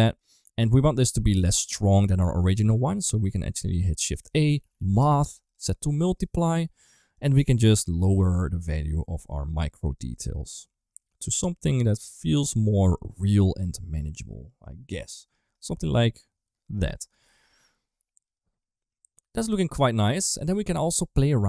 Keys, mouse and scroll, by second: 0.4 click, 0.8 middle click, 1.9 click, 2.5 click, 2.7 click, 3.6 middle click, 4.1 shift+a, 5.7-7.1 drag, 7.9-15.3 shift+drag, 16.7 right click, 17.4 ctrl+s, 18.2-19.3 middle drag, 19.7 middle click, 20.3 middle click.